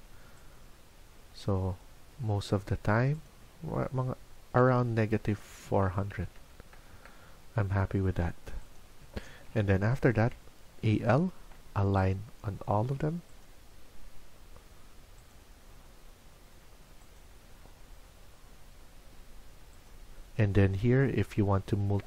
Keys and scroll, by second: 11.9 Escape, 11.9 typing.